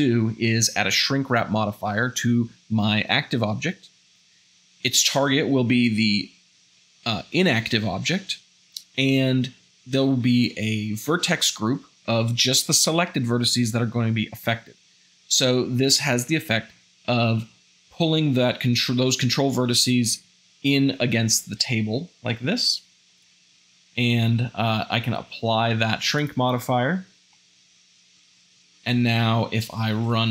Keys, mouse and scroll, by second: 29.9 space.